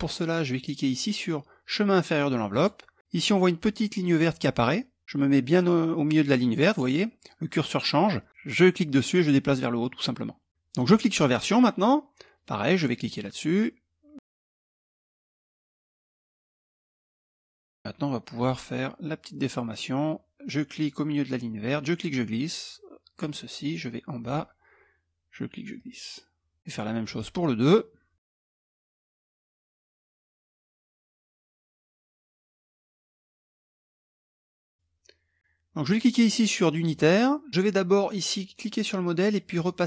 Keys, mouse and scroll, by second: 2.0 click, 8.3-10.8 drag, 12.5 click, 13.9 click, 14.5 click, 14.8 click, 15.1 click, 15.4 click, 15.8 click, 16.0 click, 16.5 click, 16.9 click, 17.2 click, 17.9 click, 21.2-23.1 drag, 23.8 click, 25.3-26.6 drag, 26.7 click, 27.8 click, 28.4 click, 28.9 click, 29.9 click, 30.3 click, 30.7 click, 31.3 click, 31.6 click, 32.3 click, 32.7 click, 33.3 click, 34.0 click, 34.4 click, 35.4 click, 37.5 click, 39.1 click.